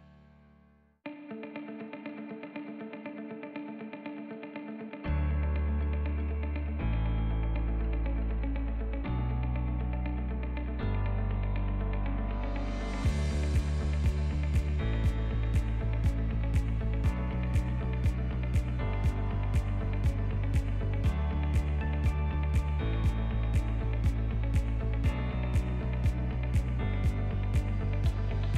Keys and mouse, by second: 0.6 e, 1.0 z, 2.4 r, 4.8 KP_7, 6.1 r, 7.9 s, 9.7 KP_1, 10.5 s, 11.8 r, 16.1-16.7 drag, 17.2 g, 18.6 s, 22.7-23.6 drag, 25.2 g.